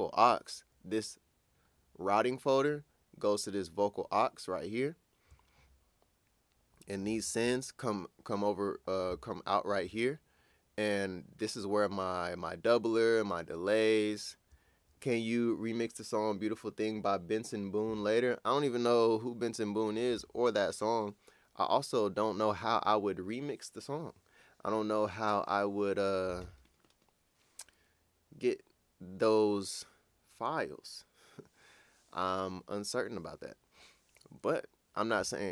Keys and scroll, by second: 5.4 typing.